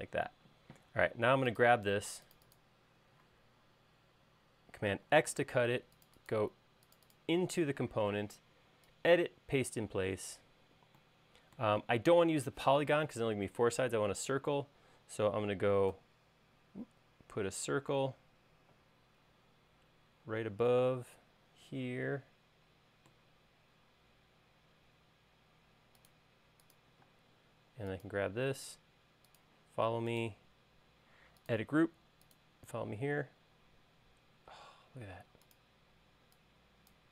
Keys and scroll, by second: 0.4 space, 5.6 super+x, 16.5 c, 27.7 space, 35.8 space.